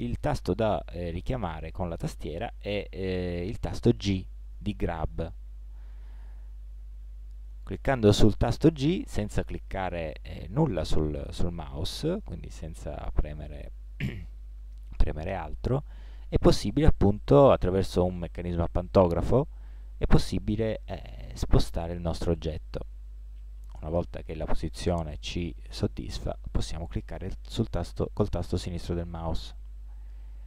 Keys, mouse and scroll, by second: 4.2 g.